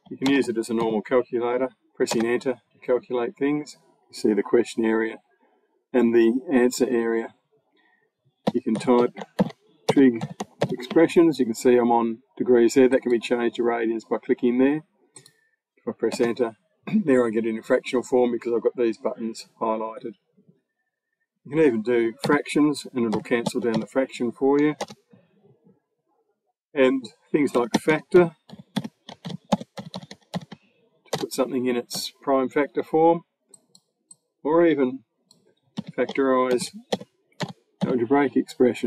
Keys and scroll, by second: 0.1 shift+=, 0.6 8, 1.9 Return, 8.0-10.4 typing, 16.0 Return, 22.1 8, 23.0 /, 23.3 1, 24.5 0, 24.6 Return, 27.1-30.2 typing, 31.0 Return, 35.6-38.1 typing, 38.7 Return.